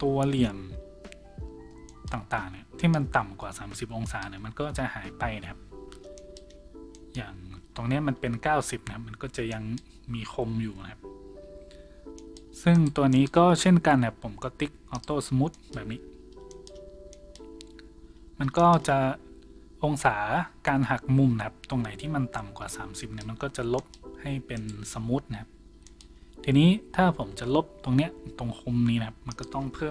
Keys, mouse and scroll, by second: 18.1 a, 24.6 right click.